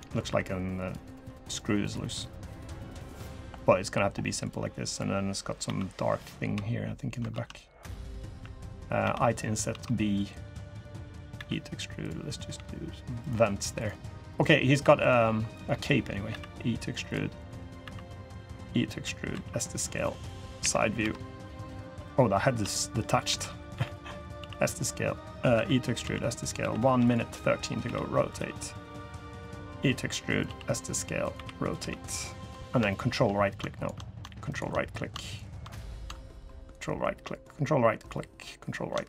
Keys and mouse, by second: 0.0 3, 3.0 click, 5.4 i, 7.1 ctrl+z, 8.8 i, 11.1 e, 12.3 g, 14.0 click, 14.6 3, 16.0 e, 17.6 e, 19.1 s, 20.4 KP_1, 20.8 KP_3, 22.5 shift+click, 23.0 r, 23.5 g, 24.1 s, 25.3 e, 25.8 s, 26.3 r, 27.6 r, 28.1 g, 29.5 e, 30.2 s, 31.1 r, 31.5 g, 32.6 shift+drag, 38.8-39.0 drag.